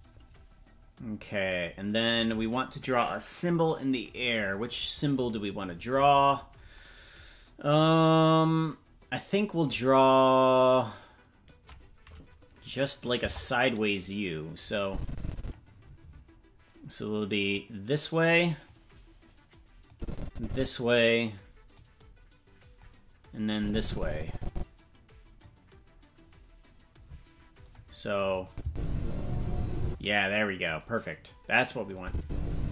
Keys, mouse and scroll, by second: 6.1-7.7 scroll down 8, 12.7 scroll up 4, 13.2 KP_0, 14.8 click, 17.5-18.7 drag, 19.9 click, 21.8-22.9 drag, 23.5-24.6 drag, 25.4-27.8 drag, 28.5-29.5 drag, 28.6 space, 29.8 space, 32.0-32.7 drag, 32.2 space.